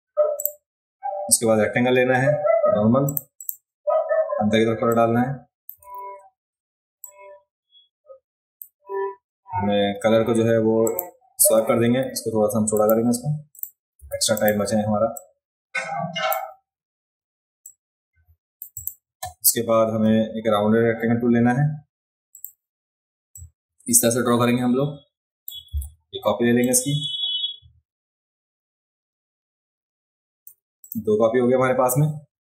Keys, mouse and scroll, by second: 0.4 click, 3.0 click, 3.4 click, 4.9 click, 6.0 ctrl+z, 7.0-8.6 drag, 10.8 click, 11.8 a, 12.7 click, 13.5 click, 14.0 v, 14.3 click, 15.1-16.3 drag, 17.6 click, 18.7 click, 22.3 click, 23.3-25.5 drag, 26.6-30.4 alt+drag, 30.8 click.